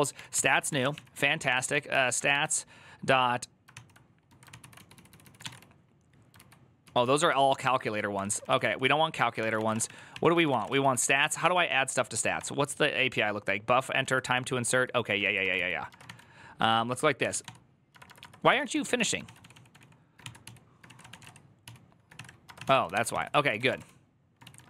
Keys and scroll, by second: 0.1 ctrl+c, 0.2-2.6 typing, 3.5 ctrl+c, 4.3 ctrl+c, 4.3-5.8 typing, 6.2 ctrl+u, 7.1 ctrl+u, 7.9 ctrl+u, 7.9 ctrl+d, 8.1 ctrl+d, 8.3 ctrl+d, 9.1-10.4 typing, 10.4 Return, 10.6 ctrl+u, 10.8 ctrl+u, 11.4 ctrl+d, 13.8 ctrl+d, 13.8 ctrl+s, 14.2-24.6 typing, 18.3 ctrl+c.